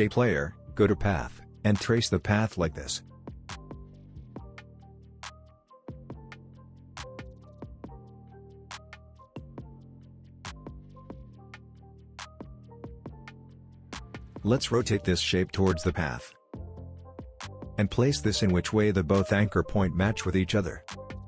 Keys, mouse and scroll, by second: 11.9 click, 12.7-13.4 alt+scroll up 2, 13.4 space, 13.7-14.0 click, 15.8 r, 16.4-18.9 drag.